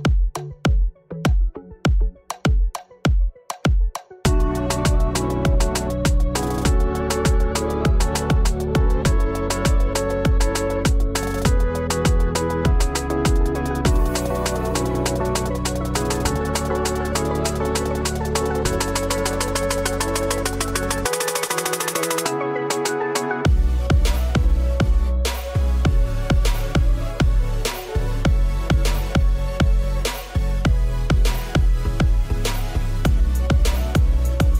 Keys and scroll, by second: 2.2 KP_1, 9.3 ctrl+l, 14.6 KP_1.